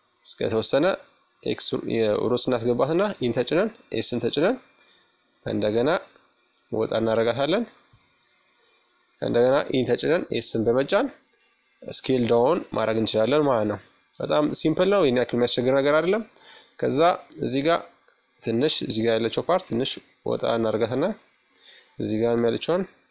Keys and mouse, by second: 3.8-5.8 drag, 11.2-13.0 middle drag, 15.1-17.0 right drag, 15.7-17.5 middle drag, 17.1-20.6 drag, 19.9-22.6 right drag, 22.3-23.1 drag.